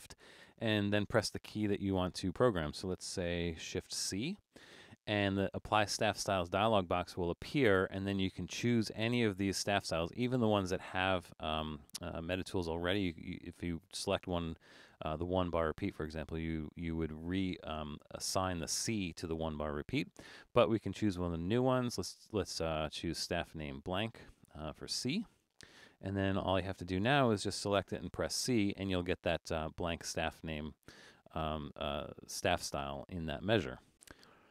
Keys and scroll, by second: 4.0 shift+c, 28.0 c.